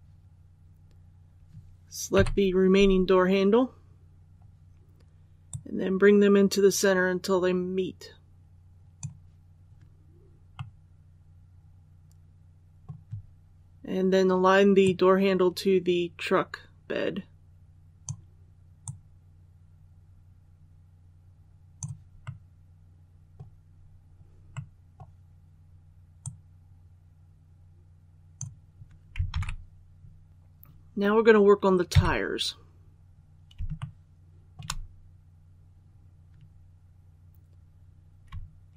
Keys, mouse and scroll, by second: 2.1 l, 3.2-3.6 scroll down 1, 5.4-9.1 drag, 10.5 middle click, 11.4 scroll up 1, 13.2-14.5 scroll up 1, 14.7-22.2 drag, 22.2-23.7 middle drag, 23.7 scroll up 1, 24.4 middle click, 26.1-29.1 drag, 29.2 alt+a, 30.3 click, 31.8 KP_3, 32.7 scroll down 1, 33.7 shift+middle click, 34.3 scroll up 1, 34.9 scroll down 1, 38.6 shift+a.